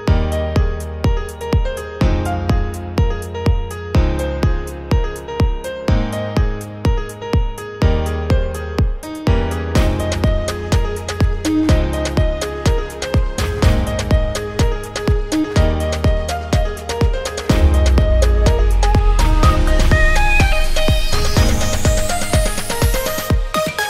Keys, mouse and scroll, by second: 1.3 click, 1.9 click, 2.8 click, 5.4 ctrl+i, 7.2 click, 7.8 click, 10.9 click, 12.1-13.3 drag, 14.5 ctrl+z, 15.1 click, 17.4 alt+click, 18.3 alt+click, 19.2-20.9 drag, 22.1 ctrl+click, 22.8 ctrl+click.